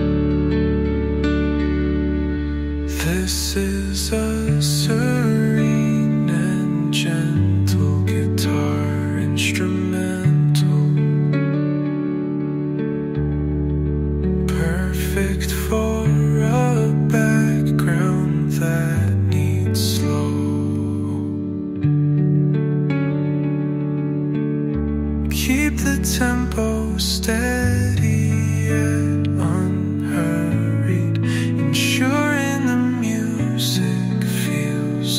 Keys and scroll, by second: 20.8 Right, 21.9 Right.